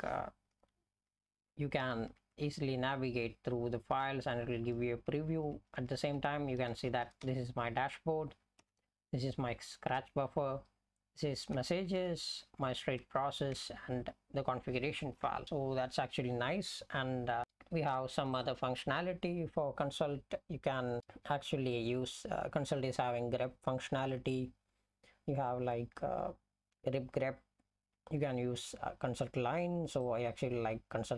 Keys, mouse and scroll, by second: 0.5 Up, 1.1 Down, 1.3 Down, 1.8 Down, 2.1 Down, 2.3 Down, 3.3 Up, 4.0 Up, 4.5 Up, 4.7 Up, 5.4 Down, 5.7 Down, 5.9 Down, 6.1 Down, 6.7 Up, 6.9 Up, 7.1 Up, 7.2 Up, 8.6 Down, 10.4 Down, 12.0 Down, 13.6 Down, 15.4 ctrl+g, 17.4 F11.